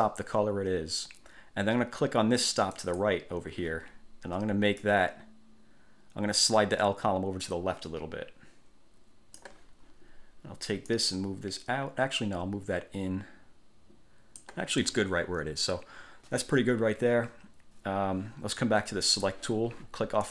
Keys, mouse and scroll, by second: 2.9 click, 5.0-9.7 drag, 11.1 click, 19.2 click.